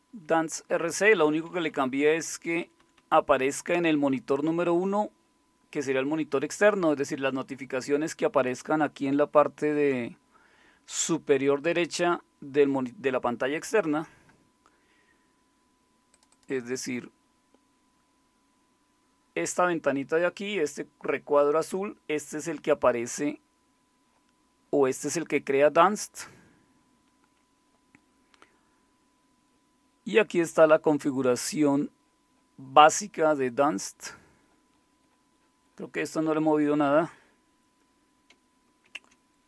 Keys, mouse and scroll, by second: 0.8 Down, 1.0 Down, 1.2 Down, 1.3 Down, 1.5 Down, 1.7 Down, 2.2 Right, 2.4 Right, 2.5-4.1 typing, 16.1-22.7 drag, 28.5-38.3 scroll down 2, 38.3-38.8 scroll down 1, 38.8 ctrl+x.